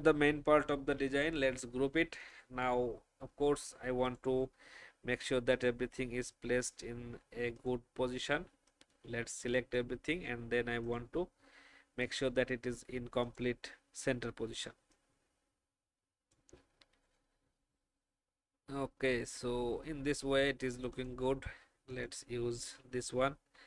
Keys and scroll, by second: 0.9 ctrl+g, 19.2 alt+shift+Down, 22.7 shift+Up, 23.4 Up.